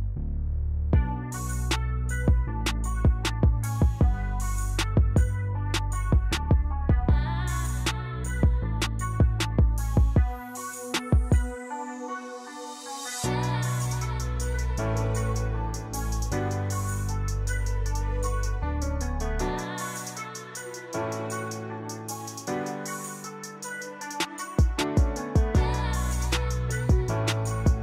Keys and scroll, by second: 9.3-11.3 typing, 12.5-13.2 typing, 15.9-18.4 typing, 20.2-21.7 typing.